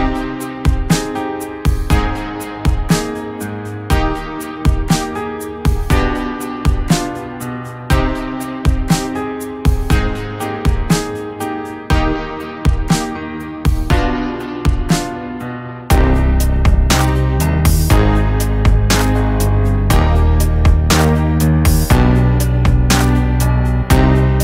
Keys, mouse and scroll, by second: 1.9-15.3 drag, 15.3 right click, 16.2 click, 17.9-18.6 scroll up 1, 18.7 alt+scroll up 1, 20.6 click.